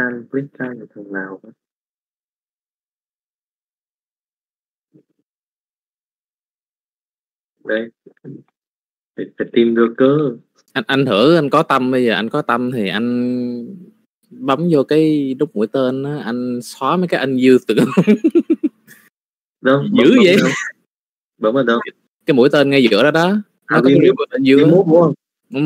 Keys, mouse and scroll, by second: 0.6 KP_Divide, 1.5 middle click, 2.4 click, 4.0 middle click, 4.9-6.0 middle drag, 7.0 click, 8.0 middle click, 9.4 click, 10.1 shift+middle click, 10.7 shift+middle click, 11.0 middle click, 12.2 click, 19.6 click, 22.5-25.4 drag.